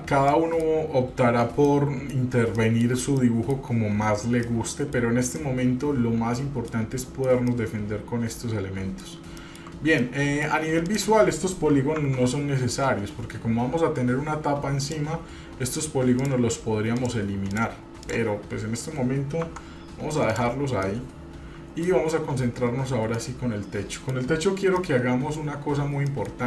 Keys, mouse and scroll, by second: 0.5-0.8 middle drag, 1.8 middle click, 2.8 shift+middle click, 3.4-3.8 middle drag, 4.6-5.2 middle drag, 5.5-6.9 middle drag, 7.7-9.2 middle drag, 9.7 shift+middle click, 10.2 middle click, 11.0 click, 12.2 Tab, 15.0 click, 15.8 click, 16.3 click, 17.1 click, 17.7 click, 18.2 click, 19.6 Tab, 20.5 click, 21.0-22.0 middle drag, 23.3-24.4 middle drag, 25.0 middle click, 26.3 middle click.